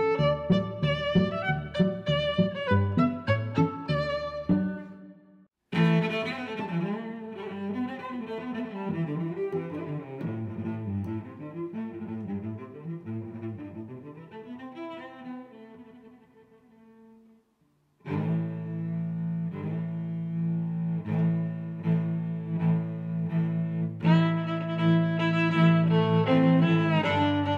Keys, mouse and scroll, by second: 3.5 click, 4.1 click, 6.3 click, 7.5 click, 7.9 0, 8.4 click, 9.7 click, 10.3 click, 10.6 middle click, 11.7 middle click, 15.0 click, 15.5 click, 17.3 click, 17.7 click, 19.6 click, 22.6 Tab, 23.0 g, 23.3 z, 23.7 click, 24.1 s, 25.2 click, 25.7 click, 26.5 middle click, 27.0 shift+g.